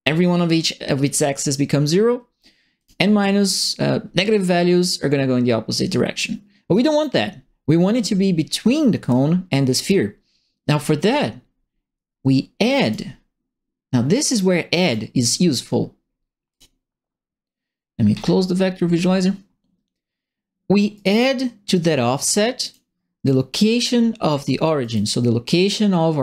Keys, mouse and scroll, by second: 2.7 click, 3.5-6.7 drag, 9.0 click, 9.8 click, 12.8 click, 14.8 click, 16.5 click, 18.1 middle click, 20.9 right click, 21.7 click, 22.6 click, 24.3 click, 24.8 right click.